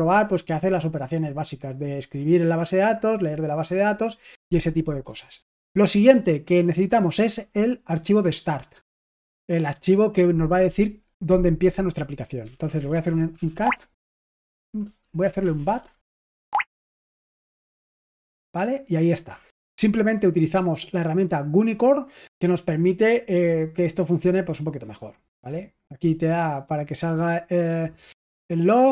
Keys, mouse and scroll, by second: 12.1-13.3 typing, 13.6 Tab, 14.4-17.5 typing, 15.0 ctrl+w, 17.6 Return.